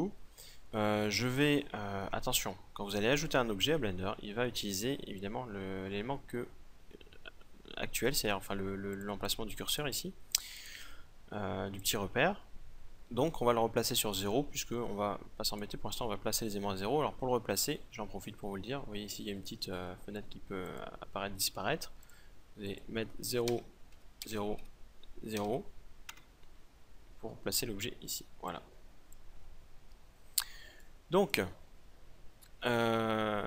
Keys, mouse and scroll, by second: 8.9-13.6 drag, 15.5-17.2 drag, 19.5-24.5 drag, 28.4-30.3 drag, 30.8 right click, 30.8-33.4 drag.